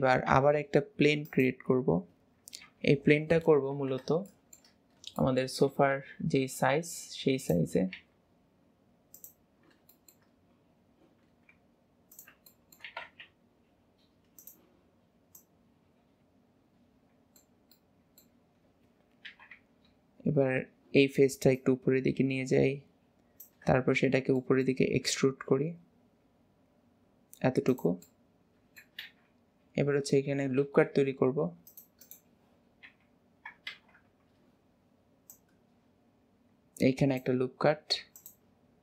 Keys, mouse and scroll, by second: 0.4 shift+a, 2.7 KP_7, 3.2 alt+z, 3.8 alt+z, 4.4 shift+middle click, 4.8-5.2 scroll down 1, 5.2 shift+middle click, 5.8 g, 9.6-10.0 scroll up 1, 10.0 shift+middle click, 10.3-11.3 scroll up 1, 11.3 s, 12.6 shift+middle click, 12.9 s, 15.4 click, 16.2-19.4 middle drag, 19.4 KP_3, 19.6 Tab, 20.6-21.6 scroll up 2, 21.6 click, 24.0-24.4 scroll down 1, 24.4 shift+middle click, 25.0 e, 28.1-29.2 middle drag, 29.4-29.9 scroll down 2, 30.6 ctrl+r, 32.9 KP_7, 33.8 alt+z, 35.4 click, 37.8 ctrl+r.